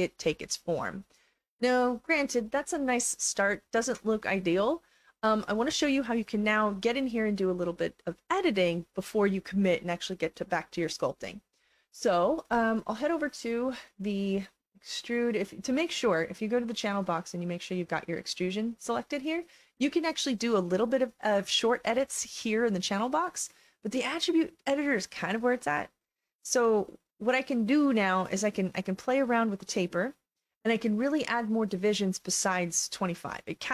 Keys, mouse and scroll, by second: 0.4 alt+click, 1.5-3.6 alt+drag, 15.6 click, 17.5 click, 18.3 click, 20.1-20.6 scroll down 3, 22.1-22.8 scroll down 1, 24.0 click, 25.5 alt+middle click, 25.7-26.8 alt+drag, 28.5-30.4 drag, 31.1 click.